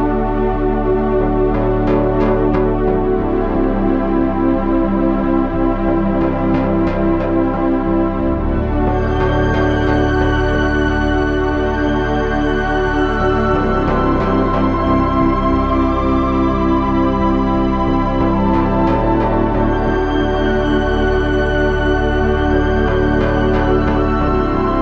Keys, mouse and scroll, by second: 0.6 KP_1, 2.7 Tab, 7.2 Tab, 8.3 click, 8.8 c, 9.3 click, 10.2 c, 13.1 ctrl+r, 14.0 Tab, 14.3 z, 23.1 Tab, 24.3 KP_1.